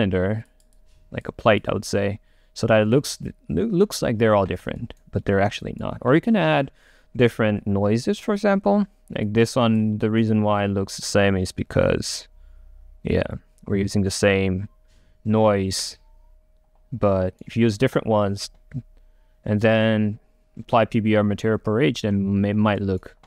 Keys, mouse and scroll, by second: 4.9 click, 4.9-8.0 right drag, 9.4 click, 10.1-17.3 right drag.